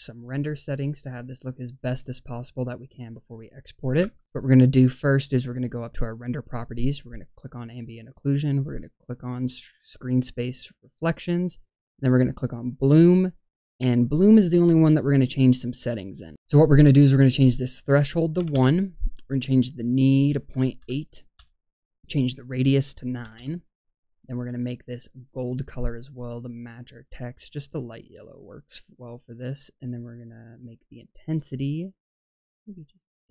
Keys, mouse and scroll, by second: 4.0 space, 5.7 click, 7.3 click, 10.8 click, 14.0 click, 15.6 click, 16.3-18.5 drag, 19.6-21.3 drag, 22.5-24.4 drag, 28.9 click, 31.6-33.3 drag.